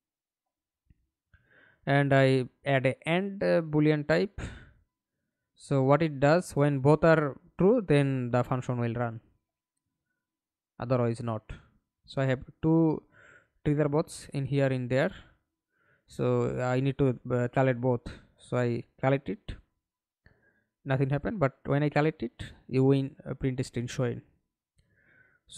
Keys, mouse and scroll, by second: 0.1-0.9 typing, 1.2 Return, 11.7 middle click, 12.7 F11, 13.6 alt+p, 16.9-23.4 typing, 23.9 Escape, 24.9 alt+p.